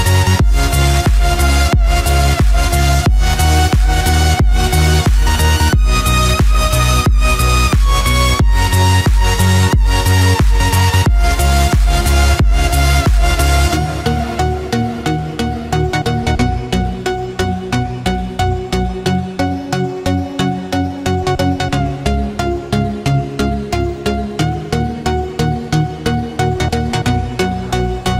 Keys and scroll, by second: 17.9 ctrl+z, 27.7 ctrl+-.